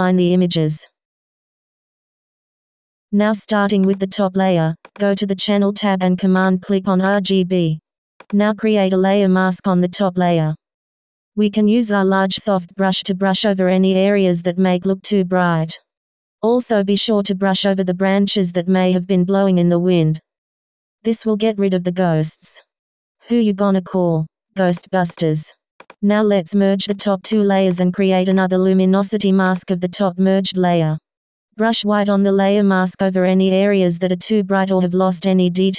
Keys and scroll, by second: 9.3 b, 11.6 super+z, 16.1 x, 30.5 x.